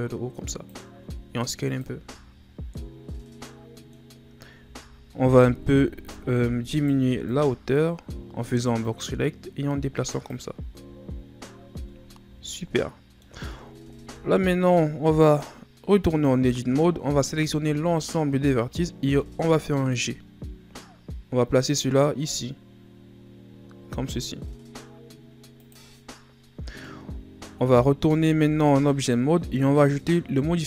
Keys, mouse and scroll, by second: 1.1 s, 1.8 z, 2.2-2.7 scroll down 3, 2.7-4.1 middle drag, 4.1-5.6 scroll up 4, 5.6 scroll up 1, 5.6 KP_1, 6.0 z, 6.8 right click, 7.0 b, 8.8-10.6 drag, 10.6 z, 11.8 Tab, 12.2 a, 12.4-12.7 scroll down 4, 12.7-14.0 middle drag, 14.0 KP_7, 15.2 right click, 16.0 Tab, 17.2 a, 17.6 a, 19.0 g, 26.9 middle click, 27.7-28.1 shift+scroll down 6, 28.1 Tab.